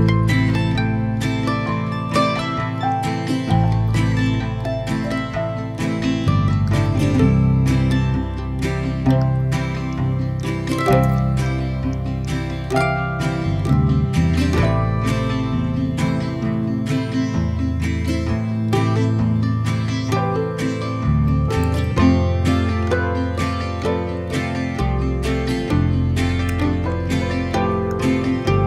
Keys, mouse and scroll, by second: 0.3-1.0 scroll up 5, 1.0-1.8 scroll down 3, 1.8 x, 2.7 x, 3.0-4.5 middle drag, 4.5-4.8 scroll down 1, 5.2 ctrl+r, 6.7 ctrl+r, 9.2 ctrl+r, 9.9 ctrl+r, 11.2 ctrl+r, 11.5 ctrl+r, 12.2 ctrl+r, 12.9-15.0 middle drag, 15.0 shift+click, 16.1 shift+click, 16.3 shift+click, 16.7 shift+click, 17.9 shift+click, 18.2 shift+click, 18.4 scroll up 4, 18.7 scroll down 1, 18.9 ctrl+b, 21.7 x, 23.5 x, 24.2-25.3 middle drag, 25.3 scroll down 1, 25.5-26.5 middle drag, 26.5 a, 26.9-28.0 middle drag.